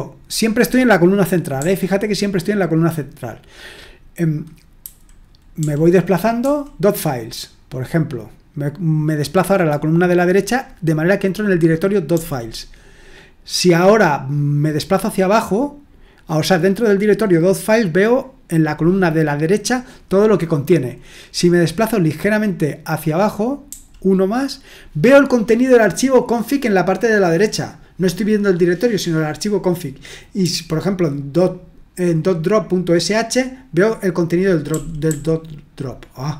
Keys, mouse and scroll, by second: 1.6 typing, 4.8-6.4 typing, 12.1 typing, 23.6 typing, 30.4 typing, 34.7-35.0 typing.